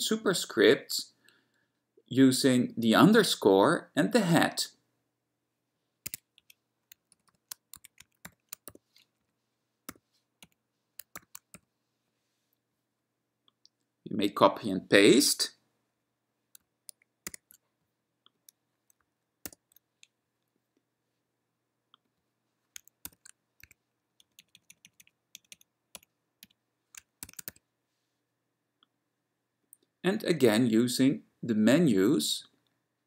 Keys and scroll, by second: 5.1 _, 6.5 Right, 7.7-10.1 typing, 10.5 Right, 11.3 <, 11.7 =, 17.3 super+w, 19.5 ctrl+y, 23.2 ^, 23.8 2, 24.3 Right, 24.4 Right, 24.6 Right, 24.8 Right, 24.9 Right, 25.1 Right, 25.4 Right, 25.6 Right, 26.0 Right, 26.5 Left, 27.2-28.1 typing.